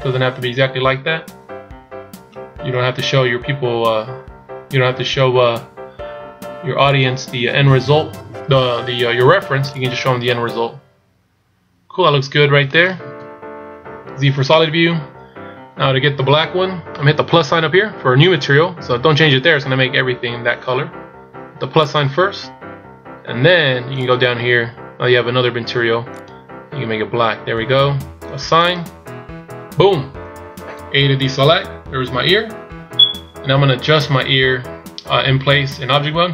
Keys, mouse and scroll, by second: 10.1 right click, 10.5 middle click, 13.3 KP_1, 14.7 z, 22.0 click, 24.1 click, 28.9 click, 31.3 a, 31.9-34.4 scroll down 7.